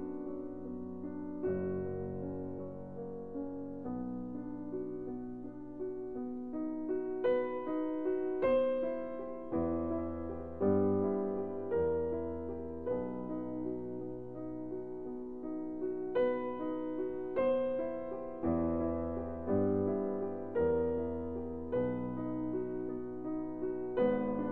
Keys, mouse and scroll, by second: 1.3 middle click, 2.6-4.5 drag, 4.5 middle click, 7.9 shift+d, 9.4-11.4 drag, 10.8 ctrl+z, 11.9 shift+d, 13.5-15.0 drag, 15.2-16.7 right drag, 16.1 ctrl+z, 16.7 ctrl+z, 17.5 ctrl+z, 18.0 ctrl+z, 19.8-21.4 drag, 20.9 shift+d, 23.1 o.